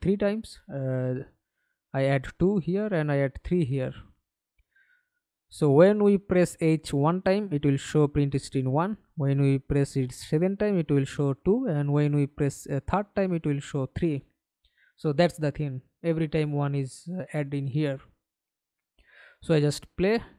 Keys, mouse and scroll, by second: 1.5 Return, 1.5 typing, 3.6 Return, 3.7-4.5 typing, 8.4-8.7 scroll down 1, 8.7 right click, 17.2 middle click, 17.9 F11, 18.5 alt+p.